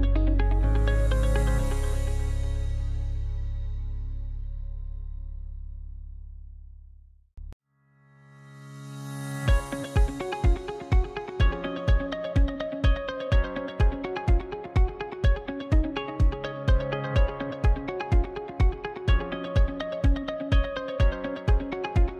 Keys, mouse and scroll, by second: 0.4 right click, 1.0-1.3 scroll up 1, 1.4 scroll down 2, 3.3 Tab, 3.8 a, 7.7-10.8 drag.